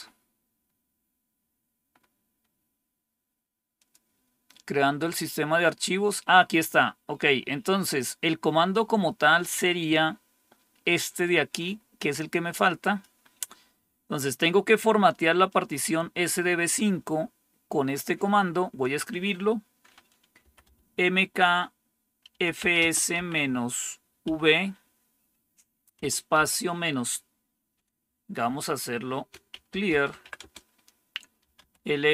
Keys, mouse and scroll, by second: 0.6-3.1 scroll down 5, 3.7 click, 7.0 scroll down 2, 11.4-13.0 drag, 15.4 click, 18.7 click, 20.1-21.0 typing, 22.2-23.1 typing, 24.2 typing, 25.9-26.3 typing, 28.0-32.1 typing.